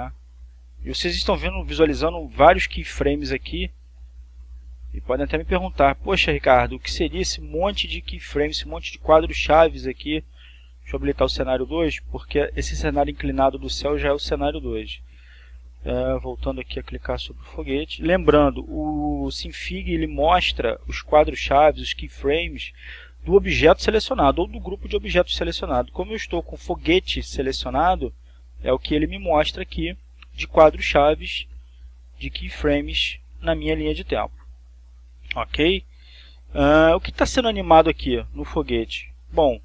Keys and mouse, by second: 4.4-7.0 drag, 7.4-8.7 drag, 11.7 click, 14.5-18.8 drag, 34.2-39.6 drag.